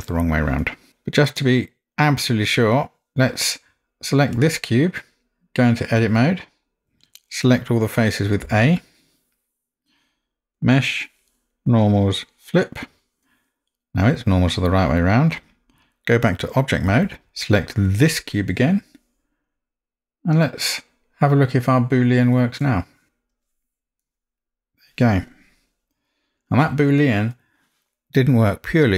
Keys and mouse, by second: 3.1 Tab, 6.1 Tab, 8.5 a, 10.7-12.8 drag, 16.9 Tab, 24.0-24.8 middle drag.